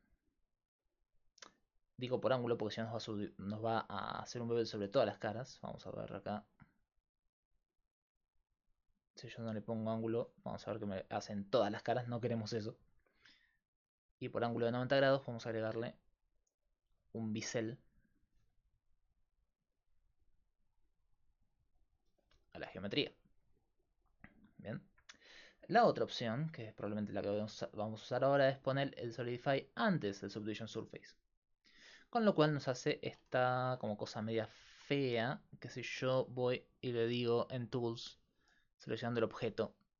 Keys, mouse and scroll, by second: 13.5 click, 17.0-19.0 drag, 20.4 click, 22.6 click, 22.9 z, 24.9 middle click, 32.1 middle click, 32.3-33.8 middle drag, 34.2 middle click, 34.5 middle click, 36.7 middle click, 37.6-39.9 right drag, 38.7-39.9 drag.